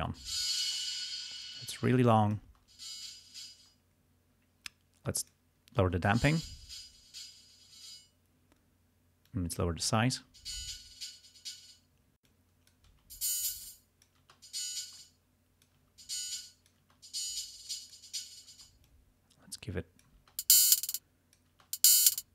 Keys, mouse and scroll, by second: 0.1 space, 0.7 space, 1.5-2.7 drag, 2.6 space, 3.6 space, 5.9 space, 7.8 space, 9.3 click, 10.3 space, 11.7 space, 12.2 click, 12.9 space, 13.5 space, 13.6 click, 14.4 space, 14.9 space, 15.0 click, 15.9 space, 16.3 click, 17.7 click, 18.6 space, 18.9-20.2 drag, 20.2 space, 20.3 space, 21.0 click, 21.6 space, 22.2 click.